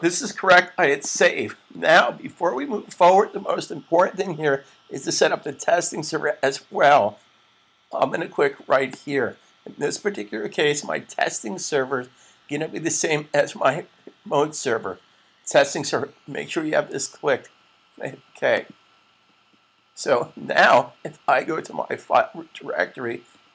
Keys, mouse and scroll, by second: 0.7 click, 8.7 click, 18.4 click.